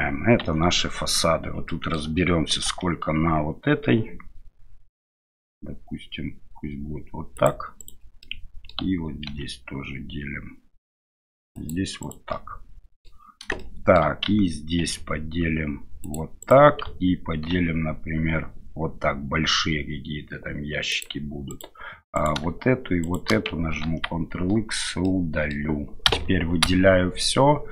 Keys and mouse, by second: 0.4 Tab, 0.8 middle click, 1.7 middle click, 2.6 ctrl+r, 8.2 middle click, 9.3 ctrl+r, 12.3 middle click, 13.6 shift+middle click, 14.8 ctrl+r, 17.5 ctrl+r, 23.0 shift+right click, 23.8 ctrl+x, 25.1 middle click, 26.1 a, 26.6 a.